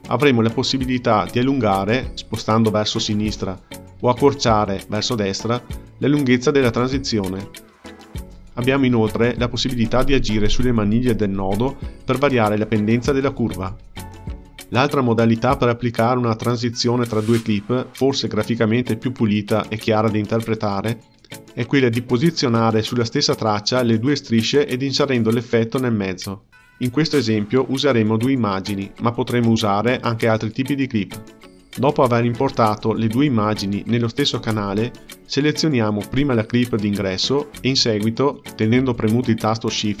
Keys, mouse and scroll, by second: 0.7 click, 1.1 space, 3.3 space, 4.0-7.1 drag, 8.2-8.7 drag, 8.7 space, 10.1 space, 12.0-15.2 drag, 15.6-17.4 drag, 18.2-20.6 drag, 22.1 click, 23.4 click, 23.7 space, 24.1 click, 25.6 space, 27.9-30.4 drag, 31.7-33.1 drag, 33.7-36.6 drag, 38.0 shift+click, 39.4-40.0 right drag.